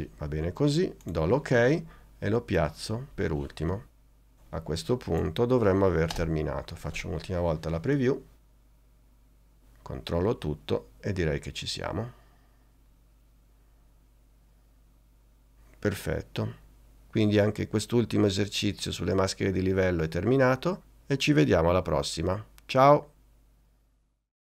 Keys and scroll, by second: 6.2 space.